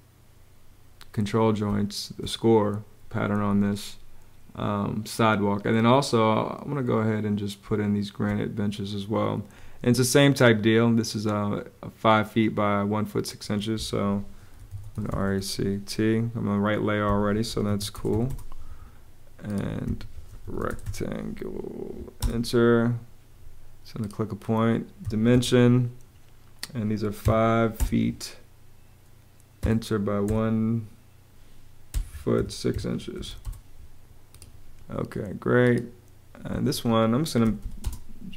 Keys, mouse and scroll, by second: 1.4 space, 7.4 space, 14.1-15.3 typing, 16.8 Escape, 17.1-18.1 typing, 19.6 Escape, 19.9-21.0 typing, 21.9 Return, 24.7 d, 25.0 Return, 26.9 5, 27.5 ', 29.3 Page_Up, 30.0 |, 31.4-33.0 typing, 33.1 Return, 36.4 Escape, 36.9-37.8 typing.